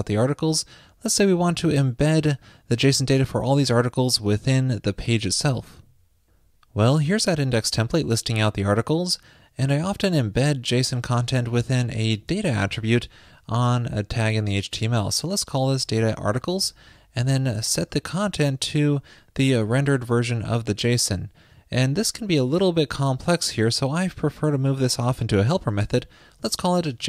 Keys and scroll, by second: 24.1 ctrl+shift+>.